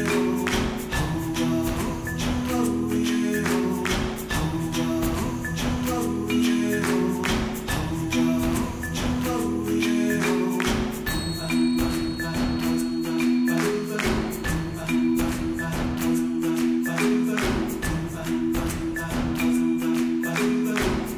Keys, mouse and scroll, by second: 1.0 KP_1, 1.4 Tab, 1.7 1, 1.8 alt+z, 2.0 alt+z, 2.2-3.2 drag, 3.5 click, 3.8 g, 6.8 click, 7.5 shift+click, 7.8 g, 10.7 click, 11.0 alt+z, 11.3 alt+z, 11.8 shift+click, 12.3 g, 14.5 click, 15.3 g, 17.5 Tab, 17.6 right click, 18.0 alt+z, 18.2 alt+z, 18.7 Tab, 19.3 alt+z, 19.5 alt+z, 19.6 click, 20.3 g.